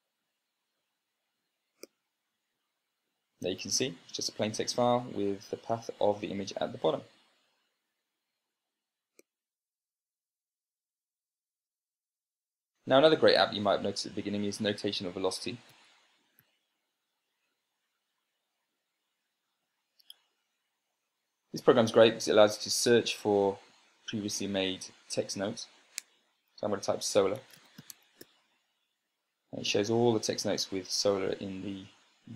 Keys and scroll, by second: 16.5 super+space, 16.8-17.1 typing, 18.0 Return, 27.6-29.3 typing.